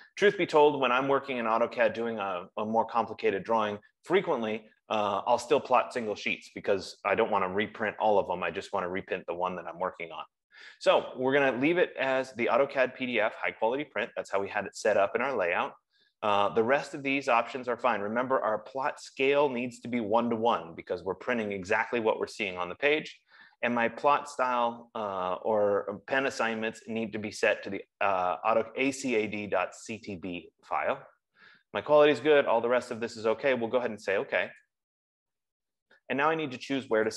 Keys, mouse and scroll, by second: 35.1 click.